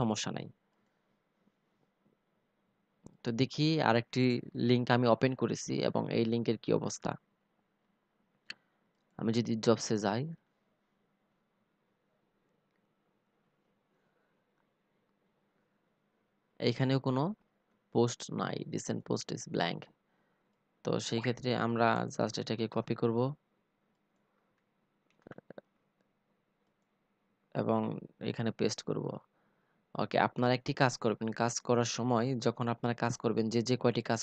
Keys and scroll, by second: 21.0 ctrl+c, 23.5 ctrl+v, 33.0 ctrl+c.